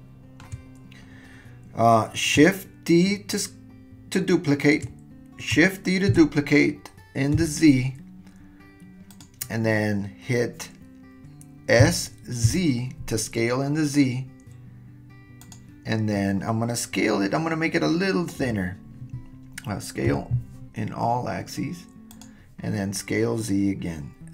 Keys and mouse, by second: 6.1 shift+d, 11.8 s, 20.1 s.